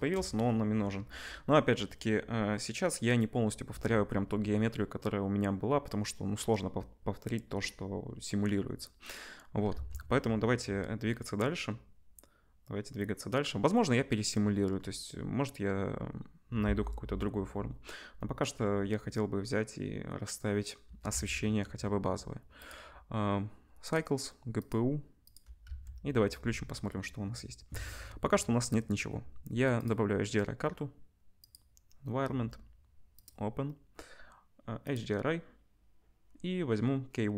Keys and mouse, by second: 2.9-6.5 drag, 6.7-9.6 drag, 9.8 ctrl+s, 21.0-22.7 ctrl+drag, 21.1 ctrl+s, 22.7-23.9 middle drag, 23.9-28.7 drag, 25.6 z, 28.7-29.8 middle drag, 29.8-37.3 drag.